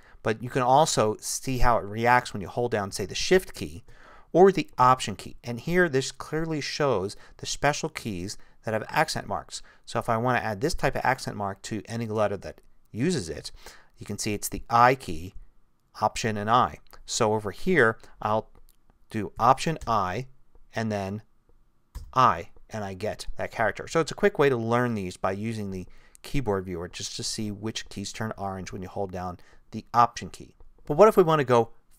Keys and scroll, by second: 19.8 alt+i.